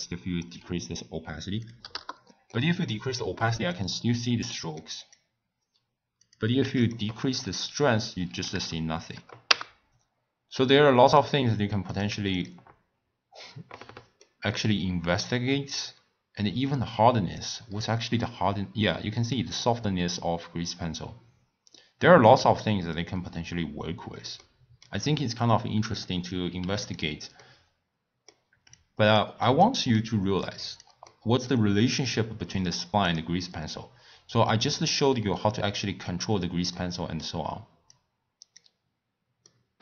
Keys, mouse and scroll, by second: 2.5-3.7 middle drag, 3.7 click, 4.5-5.0 middle drag, 5.0 click, 6.2 click, 7.4-10.6 drag, 10.6-11.9 middle drag, 11.9 click, 14.2-15.2 middle drag, 15.2-17.6 drag, 17.6 scroll down 1, 17.7-18.3 scroll up 8, 18.3 scroll down 1, 18.7 scroll up 3, 19.3-22.4 middle drag, 22.6 scroll down 4, 22.7-23.1 scroll up 1, 23.1 scroll down 1, 23.2 scroll up 2, 23.3-24.4 scroll down 7, 24.4-25.8 middle drag, 25.8-26.9 drag, 27.4-28.7 middle drag, 28.7 click, 29.4-30.4 middle drag, 30.4 click, 31.1-33.1 middle drag, 33.1 click, 35.0-37.9 middle drag, 37.9 click, 39.4-39.8 middle drag.